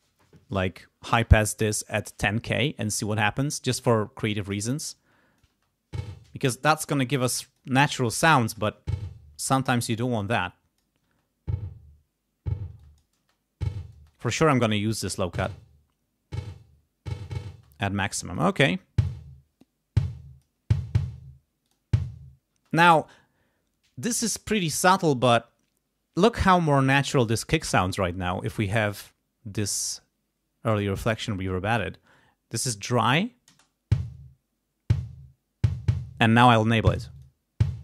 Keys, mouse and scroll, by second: 4.6 click, 5.5 space, 6.4 space, 7.1 click, 8.4 space, 9.5 space, 9.9-11.0 drag, 11.0 space, 12.7 space, 12.8 click, 14.0 space, 14.0 click, 14.9 space, 17.5 space, 18.2 click, 18.5 space, 18.8 click, 19.6-20.6 drag, 21.6 click, 22.5 space, 33.5 space, 37.2 click.